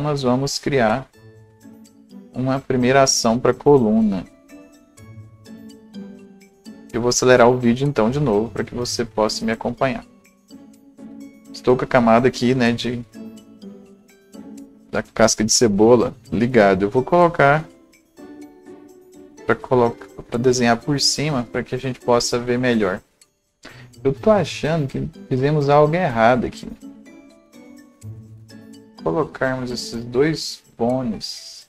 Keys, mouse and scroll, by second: 13.5-20.9 right drag, 20.9-23.3 right drag, 26.5 ctrl+z, 26.5 click, 27.4 click, 27.4 scroll up 1, 27.7 alt+click, 28.4-31.6 alt+drag.